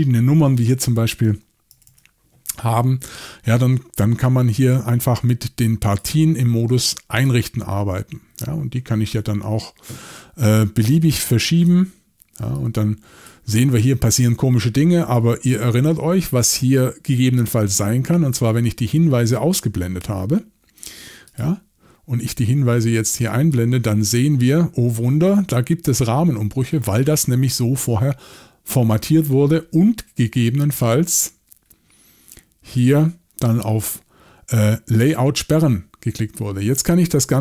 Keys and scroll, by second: 1.7 typing.